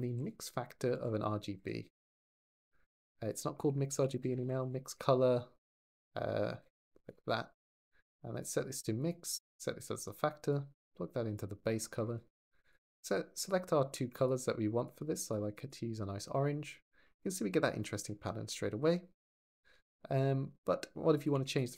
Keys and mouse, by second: 7.6 click, 8.3-9.0 drag, 10.3 click, 13.3 click, 16.8 click, 21.0 click.